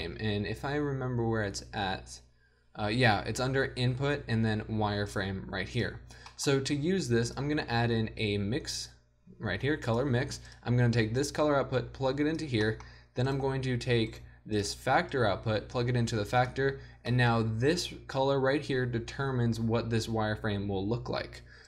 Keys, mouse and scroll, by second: 0.0 shift+a, 6.9-7.7 drag, 6.9 g, 7.7 shift+a, 12.4 click, 14.3 g, 16.8 click.